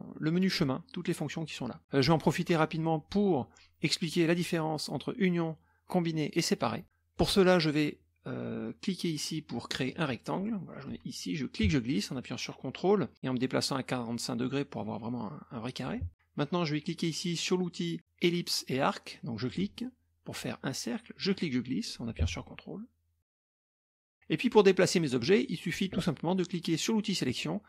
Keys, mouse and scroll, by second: 6.8 middle click, 7.2 middle click, 9.9 click, 10.4 middle click, 11.5-16.0 ctrl+drag, 19.4 click, 21.3-23.7 drag, 27.3 click.